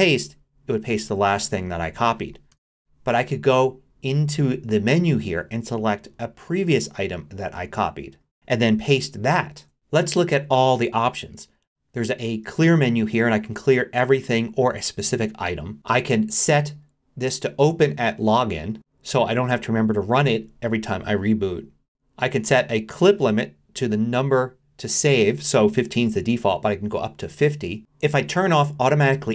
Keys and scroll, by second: 0.2 super+v, 2.5 Return, 9.5 super+v.